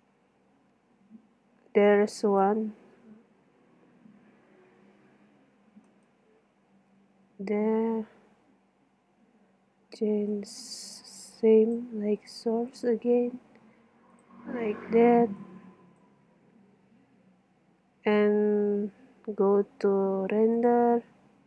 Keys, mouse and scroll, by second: 0.9 middle click, 1.4 middle click, 2.3 right click, 2.5 middle click, 4.1-6.2 middle drag, 6.2 right click, 6.5 middle click, 6.7 right click, 6.8 middle click, 7.3 right click, 7.5-8.8 middle drag, 9.1 middle click, 10.2 right click, 10.4 click, 12.3 middle click, 15.4 click, 16.9 click, 17.4 middle click.